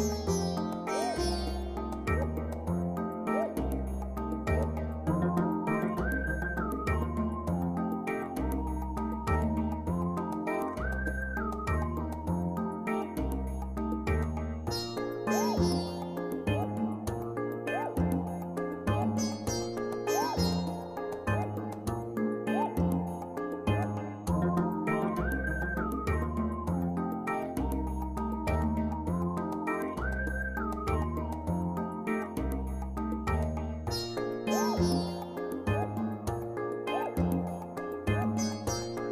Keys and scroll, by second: 12.6 ctrl+g.